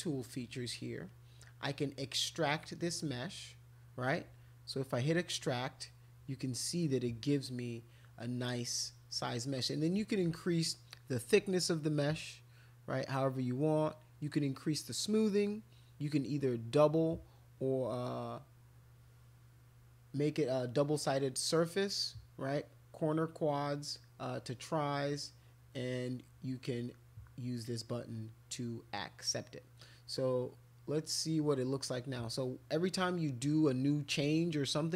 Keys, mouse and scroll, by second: 1.0 click, 5.0 click, 11.7-13.1 drag.